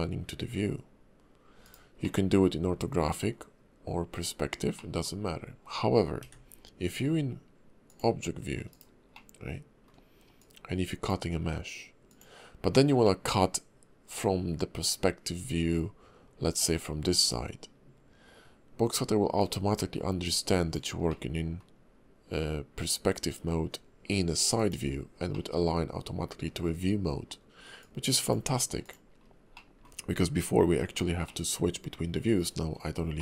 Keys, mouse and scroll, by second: 2.0 middle click, 2.6 KP_5, 3.0 KP_5, 3.3 KP_5, 4.1 KP_5, 4.8 middle click, 6.2 d, 9.1 middle click, 10.4 click, 13.0 middle click, 15.4 `, 17.3 KP_5, 18.3-19.4 scroll up 2, 19.4 click, 21.1 middle click, 25.3 middle click, 26.5 KP_5, 27.3-27.8 scroll up 2, 27.8 click, 29.2 scroll down 2, 29.5 middle click, 29.9-30.9 scroll down 1, 31.3 middle click, 32.3-33.0 scroll up 2, 33.1 middle click.